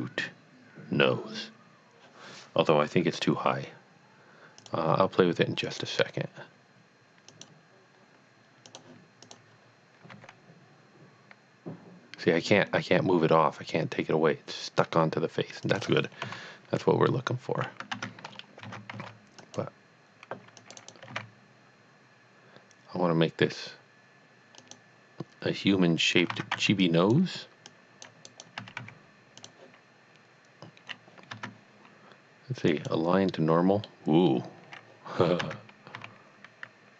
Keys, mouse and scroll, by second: 4.6 middle click, 4.6 click, 5.8 click, 7.3 click, 8.6 click, 9.3 click, 10.1 g, 15.6 click, 16.3 KP_1, 17.9 Tab, 18.3 scroll up 1, 19.1 c, 19.5 click, 20.8 right click, 21.1 g, 24.6 g, 24.7 click, 26.5 c, 27.0 click, 27.7 click, 28.3 right click, 28.6 s, 28.9 x, 29.5 click, 32.5 Tab, 32.7 click, 33.8 middle click, 35.4 Tab, 35.9 a.